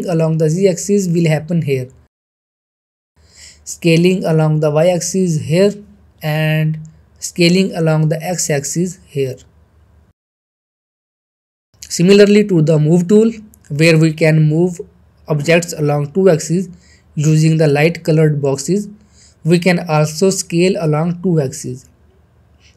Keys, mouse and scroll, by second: 0.6 ctrl+z, 2.2-3.5 drag, 3.6 ctrl+z, 4.4-6.5 drag, 6.6 ctrl+z, 6.9-7.5 middle drag, 8.4-12.0 drag, 12.0 ctrl+z, 12.7-15.0 middle drag.